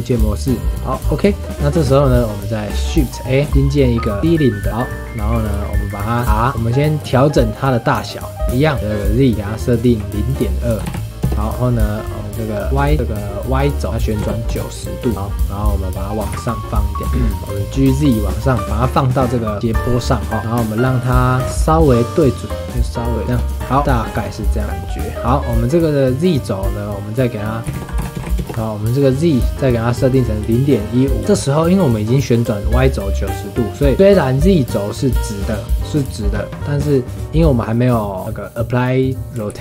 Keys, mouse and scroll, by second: 0.5 scroll down 1, 0.6-1.7 shift+middle drag, 1.7 click, 2.1-3.5 middle drag, 3.5 shift+a, 5.2-6.6 middle drag, 6.8-9.3 middle drag, 9.3-11.3 drag, 11.5-12.9 middle drag, 13.8-15.1 drag, 15.1-16.2 middle drag, 16.2 g, 17.0 KP_3, 17.1-20.0 scroll up 2, 17.5 shift+middle drag, 20.0-21.4 scroll up 9, 21.1 shift+middle click, 21.4 g, 23.6 scroll down 5, 23.8-24.6 shift+middle drag, 24.6 click, 24.8-27.7 middle drag, 27.7 s, 27.8 click, 28.5-31.2 middle drag, 31.2 click, 31.3 scroll up 1, 31.5-33.9 middle drag, 34.1-37.1 scroll down 3, 39.5 ctrl+a.